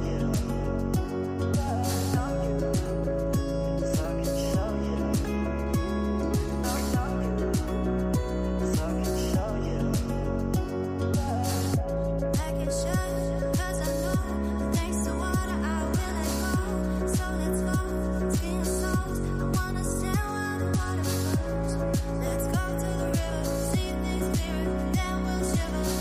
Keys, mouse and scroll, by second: 0.6 click, 1.4 scroll up 7, 1.9-3.7 middle drag, 3.7-6.3 drag, 6.3-7.5 middle drag, 7.5-8.8 scroll up 16, 9.1-9.9 middle drag, 9.9-12.9 drag, 18.3-21.5 drag, 23.4-26.0 right drag.